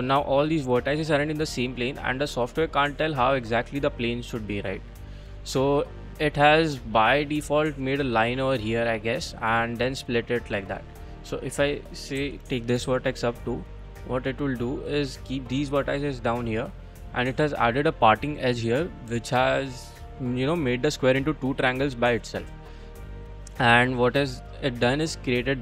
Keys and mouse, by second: 1.0 middle click, 1.6 middle click, 2.0-3.0 middle drag, 3.5 middle click, 3.8-5.7 middle drag, 6.8 middle click, 9.0 middle click, 10.2 middle click, 11.0 click, 11.4 click, 12.2 g, 12.9 z, 14.1 click, 14.3 click, 14.5 middle click, 15.5-16.8 middle drag, 17.1 middle click, 18.8-20.2 middle drag, 20.4 middle click, 21.5-24.1 middle drag, 24.4 middle click.